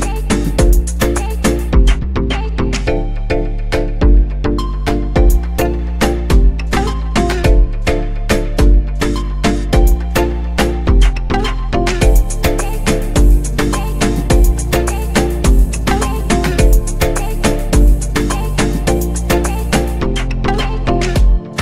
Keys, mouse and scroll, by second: 0.8 click, 2.1-6.8 drag, 8.7 click, 15.1-15.4 drag, 16.2-17.3 scroll down 1, 17.3 click, 18.5-21.6 drag.